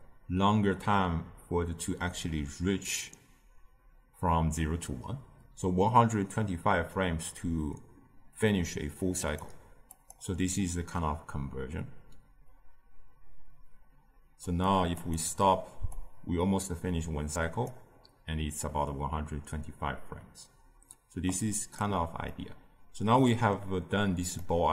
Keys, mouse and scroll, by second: 14.5-22.2 drag, 22.2-24.7 middle drag.